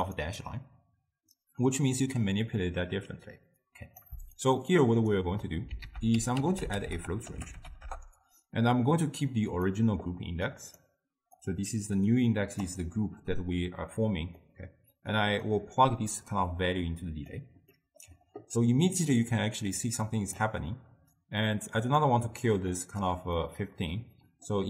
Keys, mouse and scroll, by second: 2.2-3.7 middle drag, 3.7 click, 4.4 shift+right click, 5.9 ctrl+a, 10.6 click, 11.4-14.4 drag, 14.4-15.2 middle drag, 15.2 click, 16.2-17.8 drag, 17.8-18.9 middle drag, 18.9-22.0 drag, 22.8 drag, 23.5-24.6 middle drag.